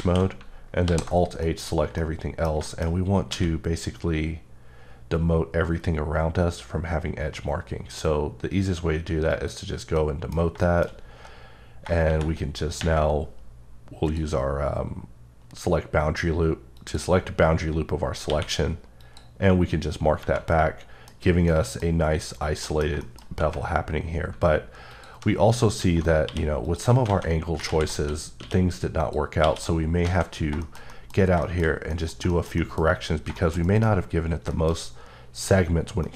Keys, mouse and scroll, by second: 0.8 h, 1.4 middle click, 3.2 scroll up 2, 3.3 q, 9.3 click, 12.0 shift+`, 12.7 ⊘, 14.1 click, 16.7 click, 18.3 q, 19.0 click, 20.1 scroll down 1, 20.5 middle click, 21.1-21.5 scroll up 2, 21.5 middle click, 22.1 scroll up 1, 22.6 middle click, 23.2 scroll up 1, 24.9 click, 26.3 q, 26.6 click, 28.0 q, 29.0 click, 29.4 q, 29.5 click, 29.9-30.5 scroll down 3, 30.0 a, 30.6 shift+middle click, 32.3 double middle click, 32.6 middle click, 32.8-33.3 scroll up 2, 33.3 shift+middle click, 33.9 scroll up 1, 34.4-35.0 shift+scroll up 3, 34.5 shift+middle click, 36.0 middle click.